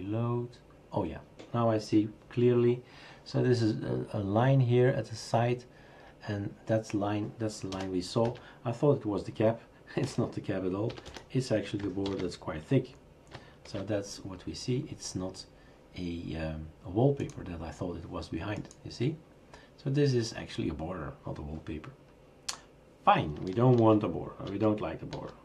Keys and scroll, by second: 7.7-8.2 typing, 10.0-11.6 typing, 12.0 ctrl+s, 13.7 shift+super+r, 23.8 ctrl+z, 24.5 ctrl+z, 25.1 ctrl+z.